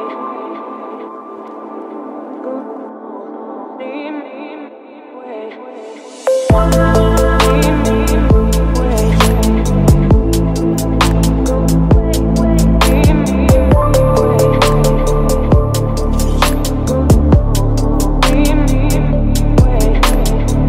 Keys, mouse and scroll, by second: 0.5 Down, 1.1 Return, 1.5 Left, 1.7 Return, 4.1-6.0 drag, 7.0-8.7 drag, 9.2 click, 11.1-12.2 drag, 15.2 click, 15.7 Return, 18.9-20.6 typing.